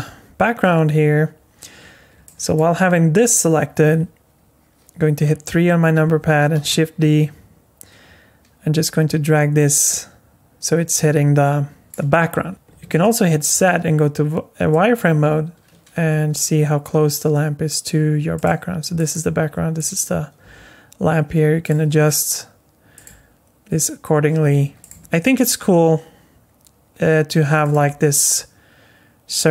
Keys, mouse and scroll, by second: 2.2 alt+middle click, 5.1 KP_3, 6.5 shift+d, 12.4 z, 12.5 z, 12.8 z, 16.1 g, 19.0 click, 19.8 click, 20.4 g, 21.8 r, 23.0 g, 24.9 s, 27.8 g.